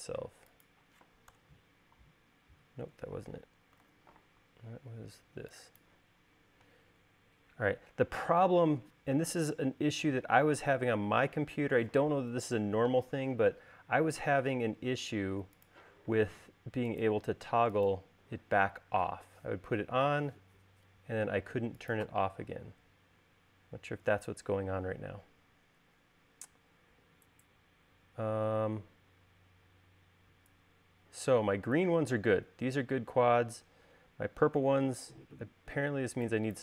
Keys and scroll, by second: 2.0 BackSpace, 4.5 super+z, 7.4 space, 22.1 e.